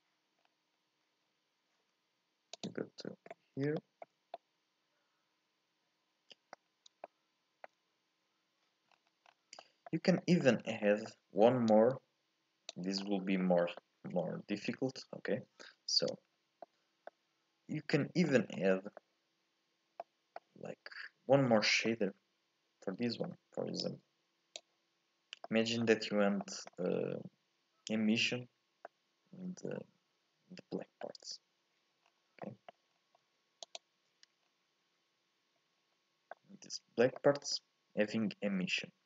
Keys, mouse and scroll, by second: 0.4-0.7 scroll up 2, 0.7-2.7 scroll down 2, 2.7 click, 3.5-3.9 scroll up 2, 3.9-8.0 shift+middle drag, 8.0-9.0 scroll up 1, 9.0-10.8 scroll down 4, 11.9 click, 21.0-21.5 scroll up 1, 22.0-24.0 middle drag, 24.0 click, 29.0-32.2 middle drag, 32.2-33.7 scroll down 4, 33.7 ctrl+shift+click, 34.5-35.7 scroll down 1, 35.7 scroll up 1, 35.9-39.0 middle drag.